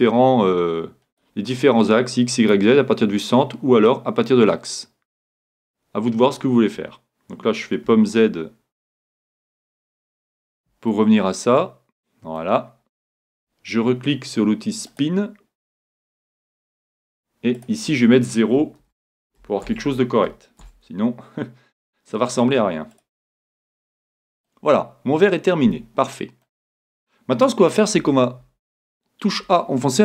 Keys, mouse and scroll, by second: 1.8-3.6 drag, 2.9-4.8 scroll down 1, 4.8-5.9 drag, 4.8 scroll down 1, 10.9-12.8 middle drag, 14.9-16.8 drag, 17.6-19.6 drag, 23.9-26.2 middle drag.